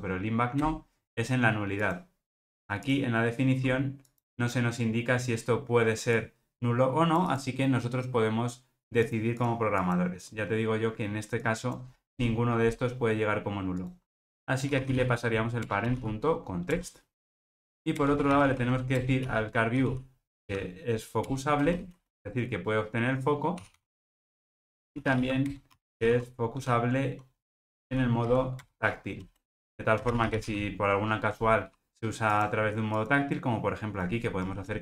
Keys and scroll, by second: 2.9 super+b, 7.9 alt+super+[, 15.7 Return, 19.1 Return, 25.5 Return.